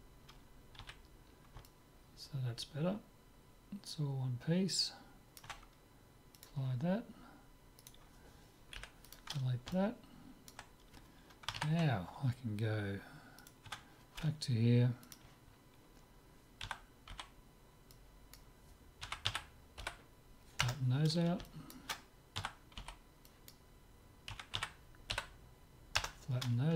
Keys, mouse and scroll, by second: 0.8 z, 1.3-3.7 middle drag, 6.4-8.3 drag, 7.8-9.5 right drag, 8.8 Delete, 9.8-11.8 middle drag, 13.4-15.2 right drag, 13.7 Tab, 15.2-16.9 drag, 16.7 a, 16.9 middle click, 17.3 b, 19.1 s, 21.5-23.4 middle drag, 22.4 a, 22.8 b, 24.3 s.